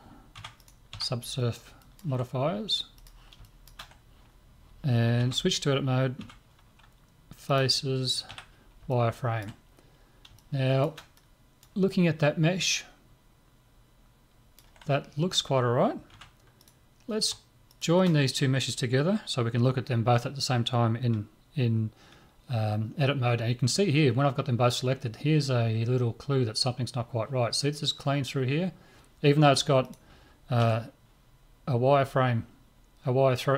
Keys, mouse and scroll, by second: 0.4 Tab, 0.6 right click, 0.9 Tab, 1.8 click, 2.1-5.2 middle drag, 3.0-5.1 drag, 5.2 Tab, 6.2 Tab, 7.5-9.7 drag, 8.3 z, 9.7-16.0 middle drag, 16.1 Tab, 16.6-19.5 right drag, 29.8 right click, 30.6 Tab.